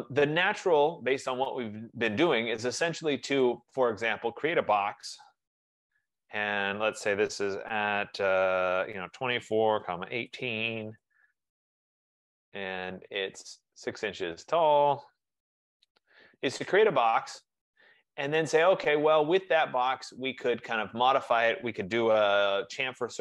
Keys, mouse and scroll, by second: 3.6 click, 5.3-5.7 typing, 7.5-8.2 typing, 8.5 click, 9.6-12.7 typing, 12.9-13.9 middle click, 13.8 middle click, 15.7 6, 15.8 ", 15.9 Return, 18.6 click, 19.9 click.